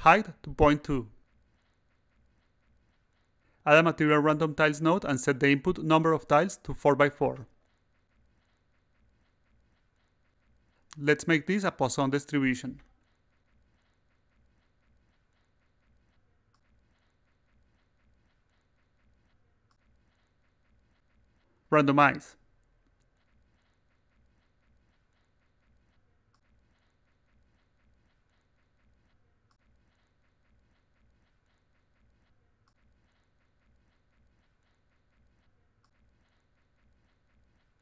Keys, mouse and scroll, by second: 0.0 2, 3.2 click, 5.3 click, 7.9 click, 8.6 4, 9.2 click, 9.5 4, 11.1 click, 11.7 click, 13.0-13.7 drag, 14.7-15.5 drag, 16.6-21.0 drag, 22.3 click, 27.3-28.6 drag, 29.4 click, 31.4 click, 33.8 click, 36.1 click, 37.0 click.